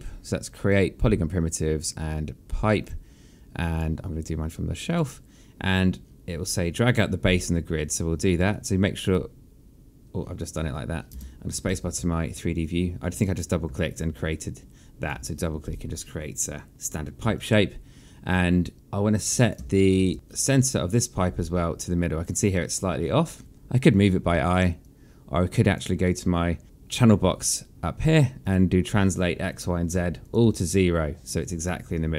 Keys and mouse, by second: 0.7 click, 4.8 click, 8.3 click, 11.1 space, 12.6 alt+click, 13.7 alt+click, 17.3 alt+click, 19.6 space, 24.8 click, 28.4 click, 29.9 KP_0, 30.2 click, 30.4 KP_0, 30.6 click.